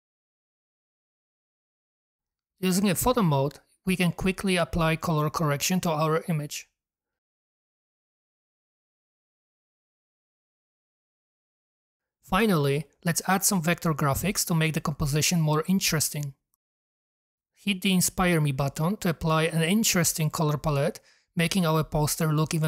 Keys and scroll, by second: 15.7 super+d.